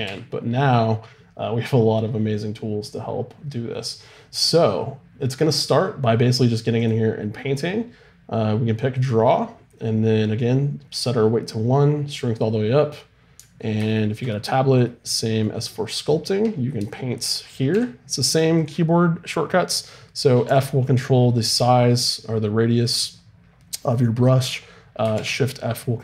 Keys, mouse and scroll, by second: 0.0 t, 6.7-14.4 drag, 14.4-17.7 middle drag, 17.7 f, 20.4 f, 22.8-25.1 right drag, 25.1 shift+f.